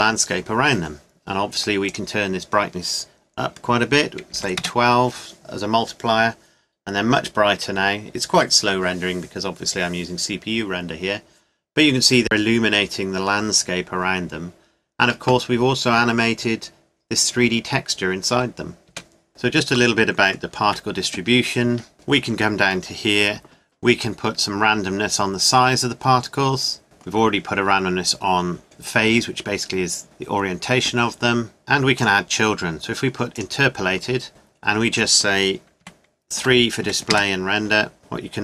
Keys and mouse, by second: 2.2 middle click, 19.0 KP_0, 19.3 Escape, 20.7 Tab, 21.7 Tab, 30.9-32.0 middle drag, 34.6 middle click, 37.1-38.4 middle drag.